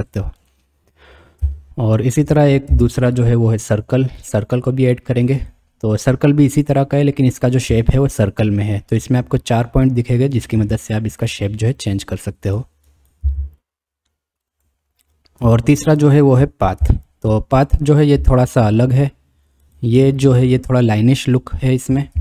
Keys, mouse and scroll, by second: 1.4 Tab, 2.7 shift+a, 7.7 Tab, 9.2 click, 10.5 g, 13.0 click, 13.2 g, 15.5 Tab, 16.8 shift+a, 22.1 KP_7.